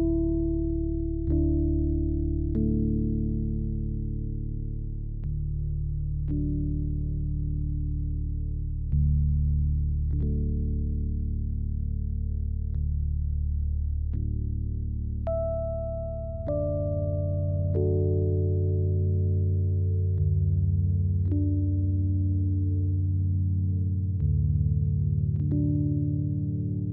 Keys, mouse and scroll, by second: 0.0-0.6 typing, 0.4 click, 1.3 click, 1.6 ctrl+s, 1.9 e, 2.2 click, 2.8 e, 3.1 z, 3.1-4.6 drag, 3.5 s, 4.7 s, 5.0 e, 5.3 right click, 5.4 s, 5.8-6.9 drag, 7.0 e, 7.3-8.7 drag, 7.6 s, 8.9-11.6 typing, 9.2 click, 9.8 click, 10.3 click, 11.2 click, 11.8 click, 12.7 e, 12.9 click, 12.9 z, 13.0 s, 13.5 click, 14.4-14.8 scroll up 2, 14.7-19.2 typing, 14.9-16.1 drag, 16.5 scroll down 2, 16.7 shift+click, 17.3 shift+click, 18.1 shift+click, 18.2-19.0 scroll down 7, 18.6 Tab, 19.1 scroll up 1, 19.4 right click, 19.7 click, 20.7 ctrl+s, 20.8 click, 21.3 click, 22.2 click, 22.4 click, 23.0 o, 23.3 ctrl+s, 23.4-23.8 scroll down 2, 23.7 ctrl+click, 24.3 click, 25.0-26.9 typing, 25.6 Tab, 26.0 click, 26.4 Tab.